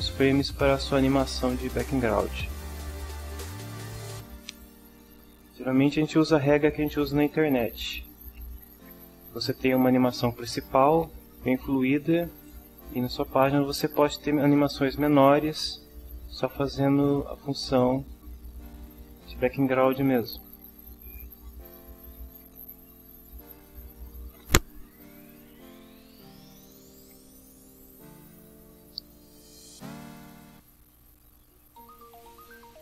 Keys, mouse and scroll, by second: 3.5 click, 4.8 drag, 23.4 click, 24.4 click, 30.4 click, 32.5 click.